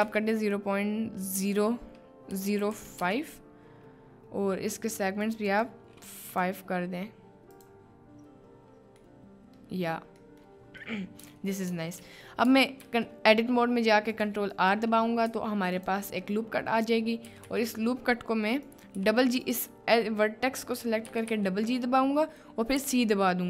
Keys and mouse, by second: 5.5 click, 6.4-7.8 drag, 9.1-9.6 middle drag, 10.2 middle click, 11.0 middle click, 12.0 Tab, 12.8 ctrl+r, 15.3 1, 15.8 click, 17.3 g, 17.5 g, 19.0 g, 21.1 g, 21.3 g, 22.9 c.